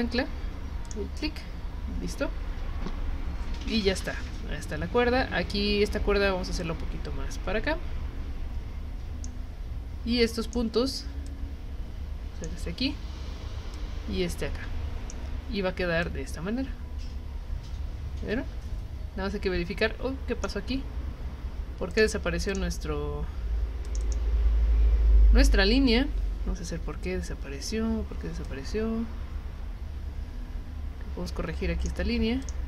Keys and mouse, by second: 0.9 click, 6.6-9.2 drag, 10.4 click, 11.3-12.4 drag, 13.7-15.1 drag, 16.0-20.4 drag, 21.9 click, 22.5 click, 23.8 click, 24.0 click, 28.4-31.8 drag, 32.4 click.